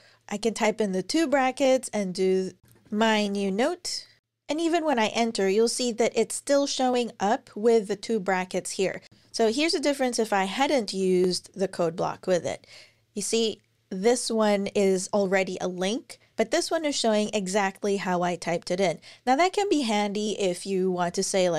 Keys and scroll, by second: 0.9-4.2 typing, 9.1 typing, 10.4 Return, 11.1 End, 11.8 Return.